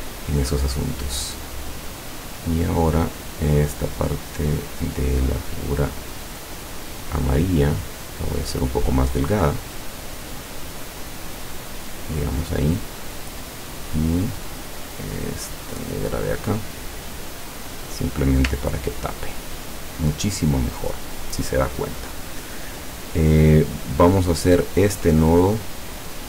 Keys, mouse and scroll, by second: 0.2 click, 1.9 scroll down 2, 2.6 scroll up 2, 4.2 click, 5.2 click, 5.6 click, 6.7-12.0 drag, 12.1 click, 13.4-15.9 drag, 17.3 click, 18.7-19.3 ctrl+scroll down 2, 19.8 ctrl+scroll down 2, 24.1 click.